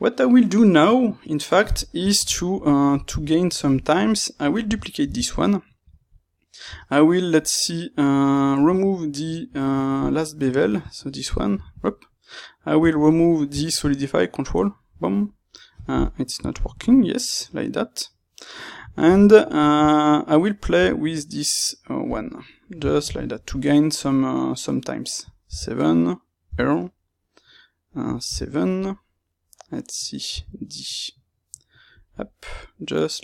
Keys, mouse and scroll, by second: 4.9 shift+d, 5.8 Escape, 10.0 space, 17.2 middle click, 28.8 middle click.